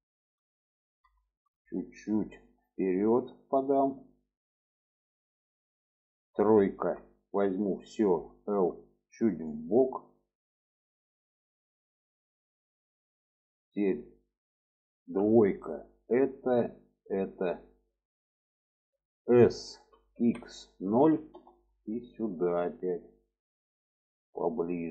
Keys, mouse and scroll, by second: 0.9 shift+middle click, 2.6-4.9 drag, 6.6 3, 8.3 l, 9.4-11.1 drag, 11.9 middle click, 14.8 2, 15.7 alt+shift+click, 17.0 alt+shift+click, 17.4 alt+middle click, 18.3 shift+middle click, 19.4 s, 22.1-24.8 drag.